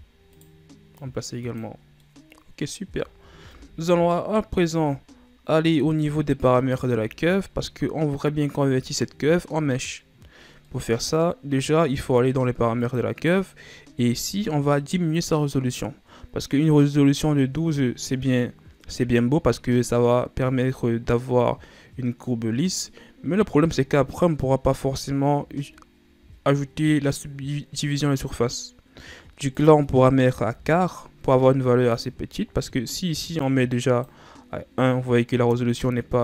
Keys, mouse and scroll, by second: 0.4 right click, 1.1 click, 2.0 scroll down 2, 2.1-3.1 middle drag, 3.1-3.6 ctrl+scroll up 4, 3.6 Tab, 4.2-4.8 middle drag, 4.8-6.2 shift+scroll up 1, 7.1-8.2 shift+scroll up 2, 8.2-9.6 scroll up 1, 10.8-12.9 middle drag, 12.9 click, 13.6-14.2 scroll up 4, 14.2-15.0 scroll up 6, 25.8-26.6 shift+scroll up 2, 26.6-29.5 scroll up 1, 29.7-32.2 drag, 33.5-36.2 drag.